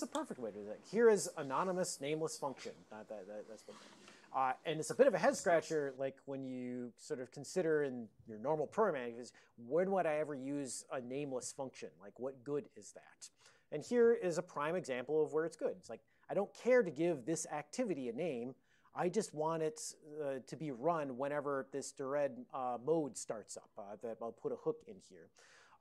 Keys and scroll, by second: 19.6 Up, 19.8 Up, 20.6 Up, 21.1 Up, 21.6 Right, 22.1 Right.